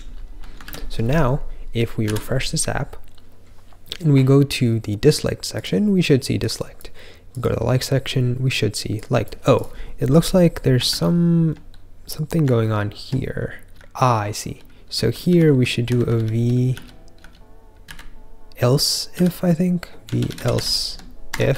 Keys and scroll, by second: 12.6 ctrl+b, 13.4-17.8 typing, 19.1-21.5 typing.